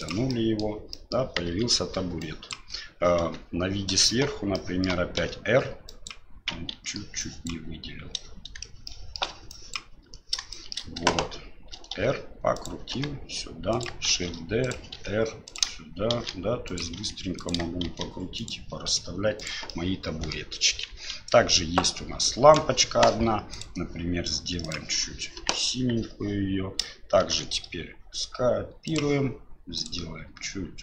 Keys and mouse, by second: 0.4 middle click, 1.0 middle click, 1.5 KP_1, 2.3 click, 3.2 KP_7, 4.5 shift+middle drag, 5.2 r, 6.7 ctrl+z, 7.2 drag, 8.9-9.2 shift+middle drag, 9.5 ctrl+drag, 10.5 shift+drag, 11.9 r, 12.9 g, 14.1 shift+d, 15.0 r, 16.1 shift+d, 17.1 r, 17.9 shift+d, 18.9 r, 19.7-20.3 middle drag, 20.9 KP_1, 21.8-23.7 drag, 25.7 KP_1, 27.2 shift+d.